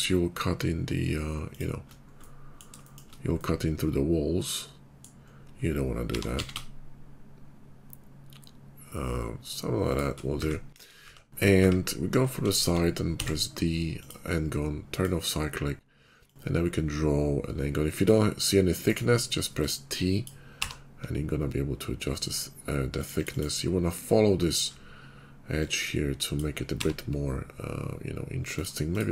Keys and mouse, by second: 6.0 g, 10.3 `, 10.7 KP_5, 11.0 `, 11.5 `, 13.1 d, 16.2-23.4 drag, 23.4-25.5 middle drag, 25.5-29.1 drag.